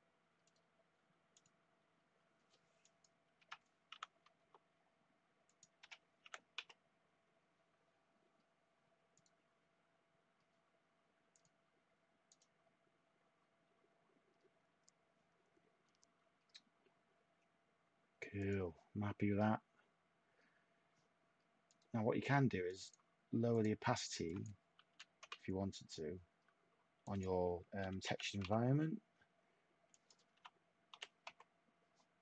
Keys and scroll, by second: 3.9 6, 4.4 Tab, 5.8 1, 6.2 6, 6.5 Tab, 24.8 typing, 25.2 Tab, 27.6-28.5 typing, 30.3 8, 30.9 5, 31.2 Tab.